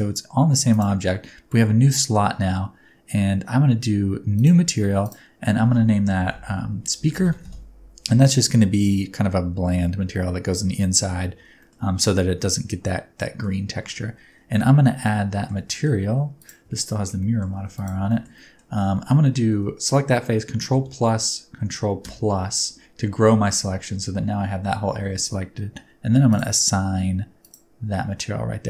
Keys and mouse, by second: 4.3 click, 5.0-8.0 drag, 11.6 shift+middle click, 13.1 middle click, 13.8 Tab, 15.0 middle click, 15.7 middle click, 16.7 shift+middle click, 17.2 middle click, 17.6 3, 17.7 right click, 18.1 shift+middle click, 18.3 middle click, 20.7 ctrl+KP_Add, 23.5 alt+z, 24.8 alt+z, 26.3-27.6 drag.